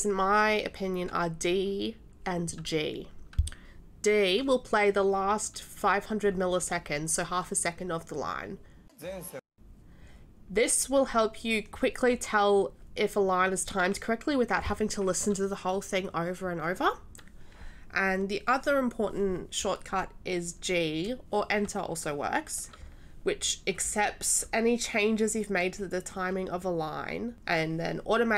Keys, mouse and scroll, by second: 8.9 d.